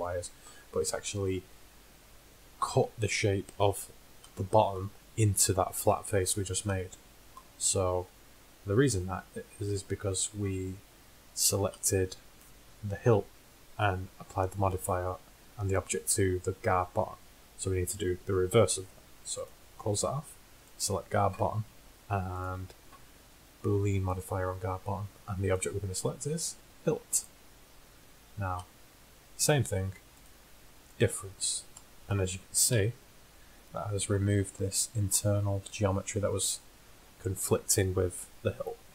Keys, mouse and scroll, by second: 4.6-6.2 middle drag, 6.9-7.3 middle drag, 11.2-12.1 middle drag, 17.3-19.4 middle drag, 19.4-22.5 drag, 20.7-21.4 right drag, 22.6-24.2 drag, 25.6-27.4 drag, 28.9-30.2 middle drag, 30.2-32.0 drag, 32.7 KP_1.